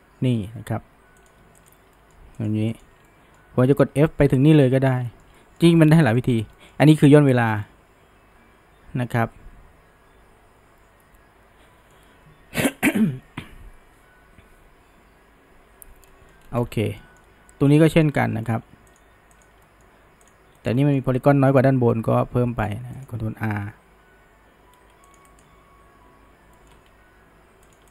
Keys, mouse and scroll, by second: 1.2 click, 1.6 shift+click, 2.0-2.4 shift+middle drag, 2.4 click, 2.8 shift+click, 3.1-3.7 middle drag, 3.7 f, 4.1-4.7 shift+middle drag, 4.7 f, 5.1-7.1 shift+middle drag, 7.1 f, 7.7-10.8 middle drag, 16.1-16.5 middle drag, 16.5-17.0 scroll down 1, 17.0-18.1 shift+middle drag, 18.1-18.5 scroll up 1, 18.5 shift+middle click, 18.9 click, 19.4 shift+click, 19.6-20.3 middle drag, 20.3 click, 20.6-21.5 shift+middle drag, 21.5 g, 25.3 right click, 26.6 middle click, 26.9 g.